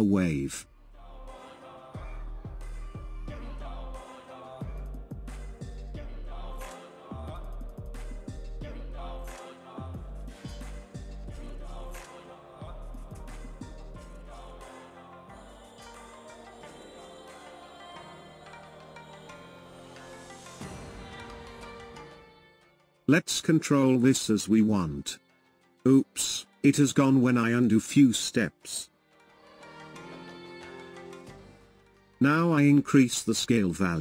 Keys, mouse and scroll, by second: 0.3-3.3 drag, 4.2-7.2 drag, 7.8-10.8 drag, 14.9-17.9 drag, 20.4-22.6 drag, 24.0-25.2 ctrl+z, 27.4-30.5 drag.